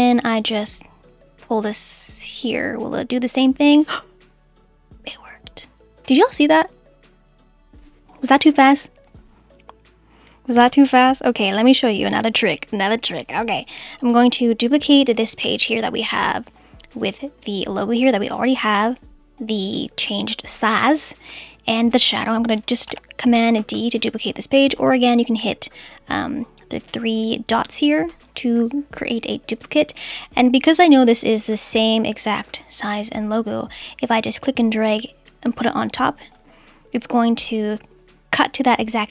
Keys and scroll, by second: 10.6 BackSpace, 23.6 super+d.